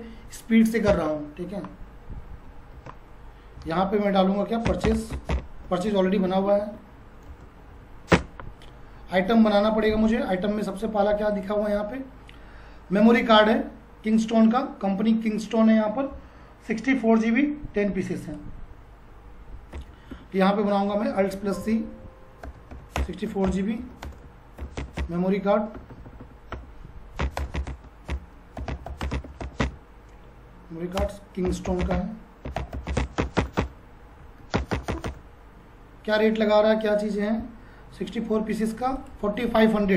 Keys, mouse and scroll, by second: 0.9 ctrl+a, 2.7 ctrl+a, 3.6 alt+c, 4.4-5.9 typing, 7.3 space, 7.7 Down, 8.1 Return, 11.3 click, 18.2 click, 19.7 shift+m, 21.3 alt+c, 22.4-25.5 typing, 27.3-33.5 typing, 34.2 Down, 34.5 Return, 37.0 click.